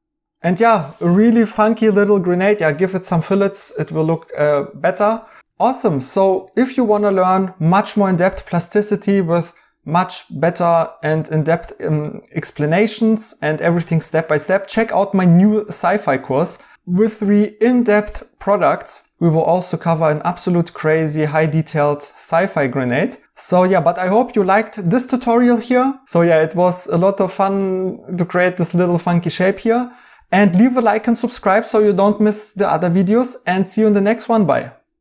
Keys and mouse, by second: 0.5 right click, 2.4 right click, 8.1 right click, 12.7 right click, 15.8 right click, 19.1 right click, 24.8 right click, 26.1 right click, 31.3 right click.